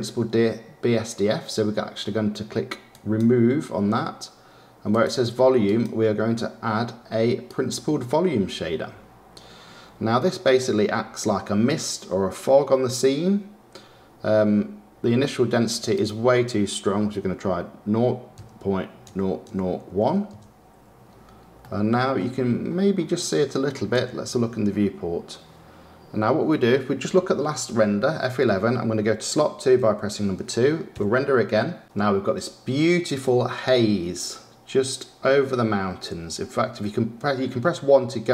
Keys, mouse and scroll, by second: 4.8-8.7 drag, 10.5-12.0 middle drag, 12.0-15.0 scroll up 2, 15.9-19.0 drag, 21.6-22.6 middle drag, 22.6-23.9 scroll up 2, 23.9 KP_0, 27.1 F11.